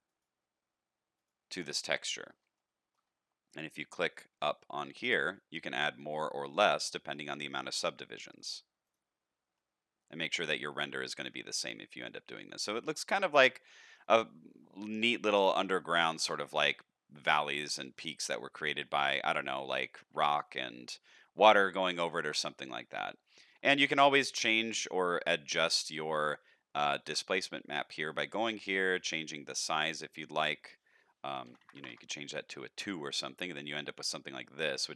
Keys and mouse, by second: 0.0 click, 2.5 shift+middle click, 5.1 click, 6.8 shift+middle click, 8.4 click, 8.8 click, 9.6 middle click, 11.3-12.3 middle drag, 13.2 shift+middle click, 13.5-14.0 drag, 14.2 shift+middle drag, 14.7 middle click, 17.4-17.9 shift+middle drag, 18.2 middle click, 19.7 shift+middle click, 20.6 shift+middle drag, 21.2 middle click, 21.8-22.3 shift+middle drag, 23.2 shift+middle drag, 26.7 click, 29.0-33.1 shift+drag, 33.5 middle click.